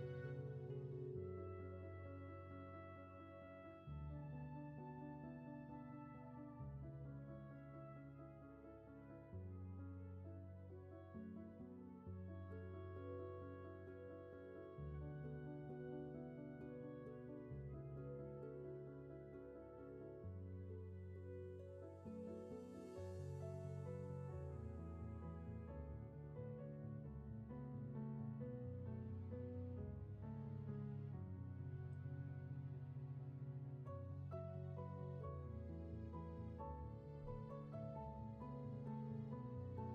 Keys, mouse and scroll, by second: 1.5 ctrl+z, 9.8 ctrl+z, 22.5 ctrl+z, 33.5 ctrl+z.